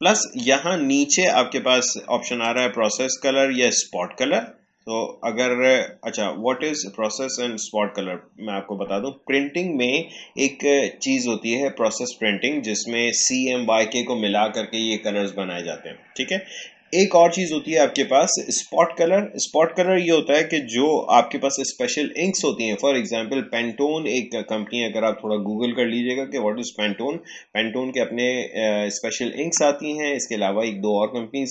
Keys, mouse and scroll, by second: 2.4 click.